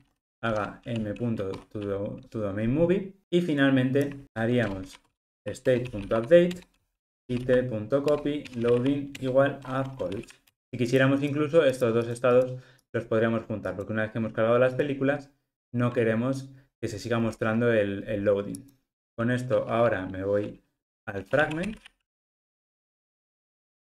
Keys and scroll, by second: 0.5 alt+shift+Right, 1.5 alt+shift+Right, 1.6 Escape, 5.8 Return.